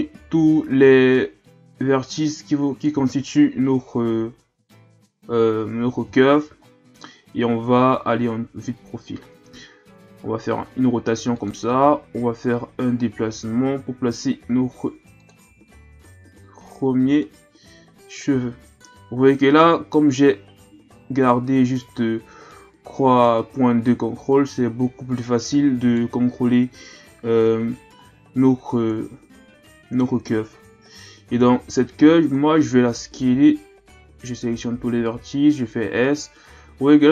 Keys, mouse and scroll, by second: 3.2-3.5 shift+scroll up 4, 3.9-4.9 scroll up 1, 5.3 KP_3, 6.5-7.6 ctrl+scroll up 9, 8.1-8.9 ctrl+scroll up 1, 9.4 r, 11.7 g, 15.7-16.5 scroll up 2, 16.5-17.2 scroll up 1, 17.2 right click, 22.5 right click, 23.8 right click, 28.0-28.9 scroll down 2, 28.9 KP_1, 31.4 KP_3, 32.4-33.0 scroll up 1, 33.3 a, 33.9 a, 34.6 s.